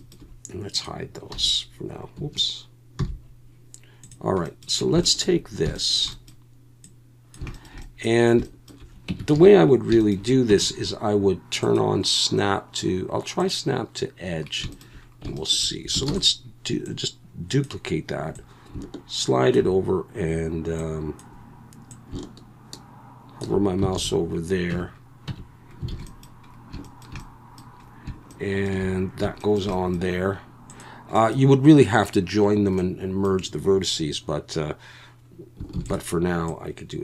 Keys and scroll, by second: 1.3 g, 2.2 Escape, 3.0 h, 9.1 Tab, 9.3 a, 10.5 Tab, 16.1 shift+d, 23.9 alt+a, 24.7 Tab, 25.3 Tab, 25.9 alt+a, 35.8 shift+d.